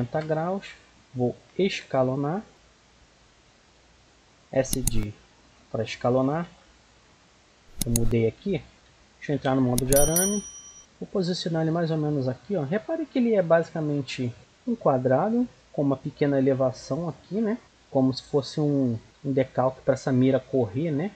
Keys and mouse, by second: 1.6 s, 4.7-5.1 middle drag, 5.2 middle click, 6.2 s, 7.2 g, 8.4 g, 8.7 z, 9.5 middle click, 11.0-12.7 drag, 13.3 middle click, 13.5-16.6 middle drag, 17.7-19.0 middle drag.